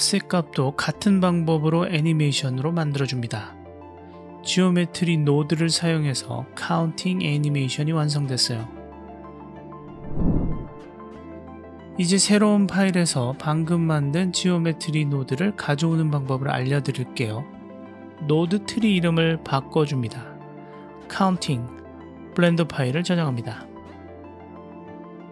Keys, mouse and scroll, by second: 0.0 click, 1.0-2.3 drag, 3.0 click, 3.5 click, 4.6-5.7 drag, 6.6 drag, 7.2-8.1 drag, 8.1 space, 10.8 middle click, 17.6 click, 18.5-20.9 drag, 23.5 click.